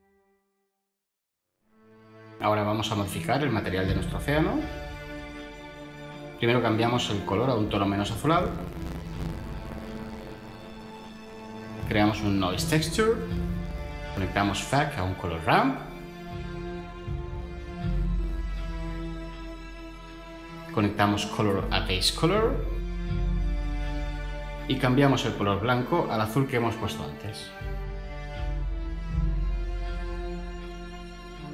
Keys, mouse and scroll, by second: 11.9 ctrl+shift+a, 12.2-12.7 typing, 13.1 scroll down 1, 13.3 Return, 15.7-16.6 typing, 17.5 Down, 17.6 Return.